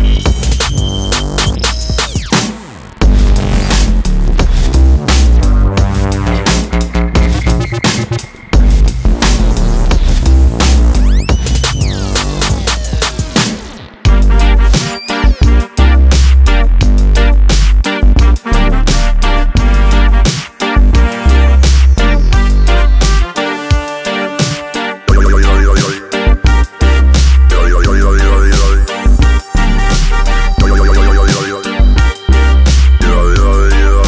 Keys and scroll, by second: 2.9 ctrl+z, 8.5 ctrl+e, 22.7 ctrl+r, 22.9 Escape, 26.1 ctrl+e, 28.1 ctrl+e, 29.9 ctrl+e.